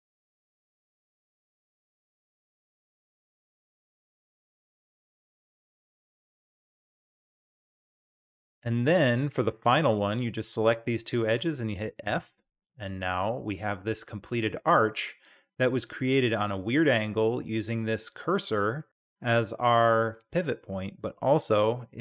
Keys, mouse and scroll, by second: 2.3-3.3 middle drag, 3.7 e, 5.7 e, 10.7 shift+click, 11.4 middle click, 12.0 f, 12.6-13.4 middle drag, 13.5 Tab, 14.4-16.0 middle drag, 18.8 click, 18.9-19.9 middle drag, 20.6-21.1 middle drag.